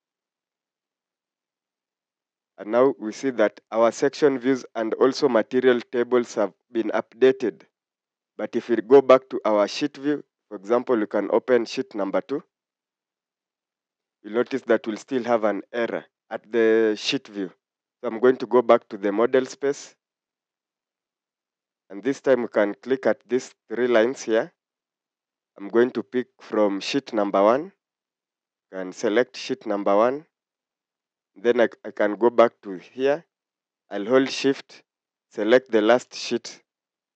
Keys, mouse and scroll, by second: 5.1 scroll up 1, 6.3 scroll down 1, 35.4 shift+click.